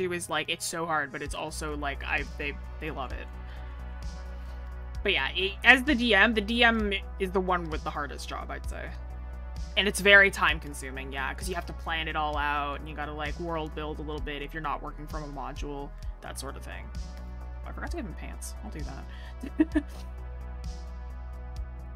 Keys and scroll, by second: 9.6 scroll.